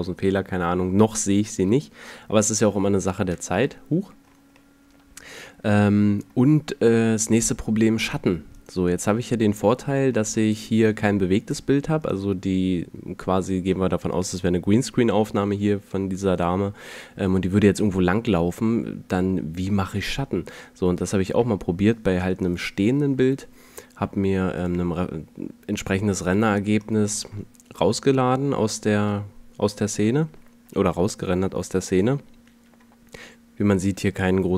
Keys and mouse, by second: 2.3-2.7 middle drag, 3.6 KP_Decimal, 6.9 a, 9.3 a, 13.1-13.7 middle drag, 17.2 middle click, 20.3 a.